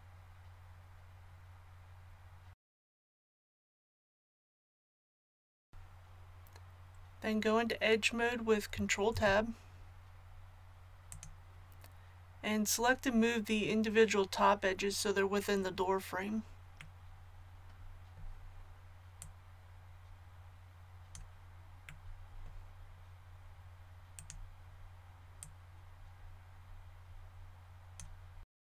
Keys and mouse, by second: 3.1 l, 3.5 shift+d, 4.1-9.1 drag, 9.1 ctrl+Tab, 19.1-21.0 drag, 28.4 middle click.